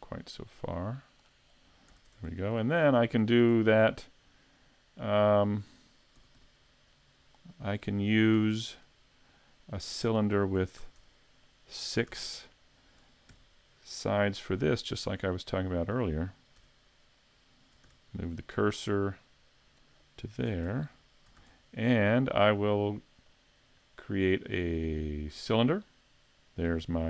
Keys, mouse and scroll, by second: 1.9 a, 2.1 Tab, 2.2-2.6 scroll down 2, 2.6 middle click, 3.2 shift+middle click, 6.2 s, 7.8 click, 8.4 Tab, 8.9 right click, 9.7 click, 10.8 a, 11.0 Tab, 11.5 middle click, 12.1 a, 13.3 shift+c, 14.0 shift+middle click, 15.9 right click, 16.6 Tab, 17.0 right click, 17.9 shift+s, 20.7 Tab, 20.7 a, 21.4 shift+a, 24.9 shift+a, 26.7-27.0 scroll down 3.